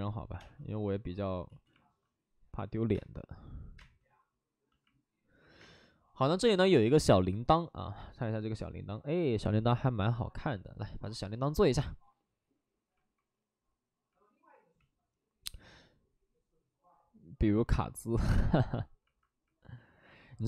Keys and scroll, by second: 0.2 5, 0.9 space, 1.4 ctrl+z, 2.9 space, 6.1 space.